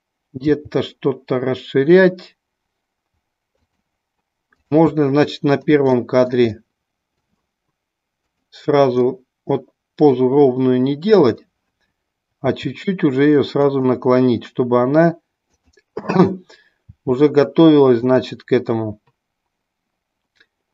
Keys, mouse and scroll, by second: 6.0-6.5 middle drag, 6.6-7.4 middle drag, 8.4 click, 9.1-10.2 middle drag, 11.3 click, 13.7 click, 15.5 click, 18.1 click.